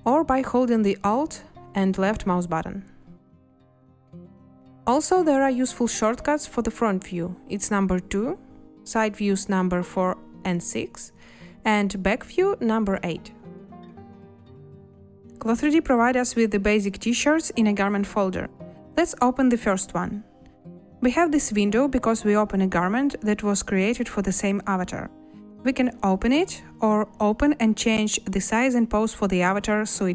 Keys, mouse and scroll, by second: 8.1 2, 9.9 4, 10.8 6, 13.1 8, 14.4 2.